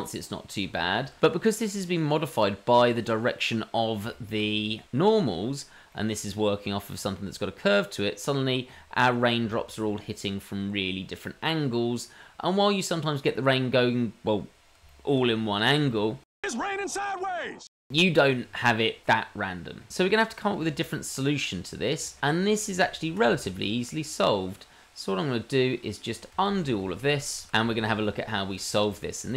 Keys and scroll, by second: 25.3 ctrl+z, 26.4 ctrl+z, 27.3 ctrl+z, 27.9 ctrl+z, 28.0 Tab.